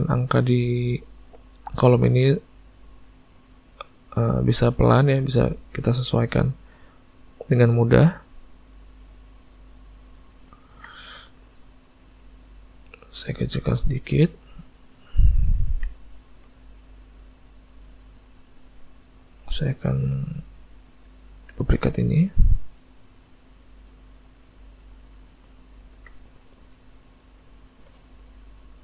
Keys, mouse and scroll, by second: 10.8 alt+a, 11.0 middle click, 12.7 click, 13.4 s, 15.8 alt+a, 16.1 middle click, 18.4 middle click, 19.0 middle click, 19.6 click, 21.7 shift+d, 23.3 click, 24.8 middle click, 25.2 z, 26.7 click, 27.4 click.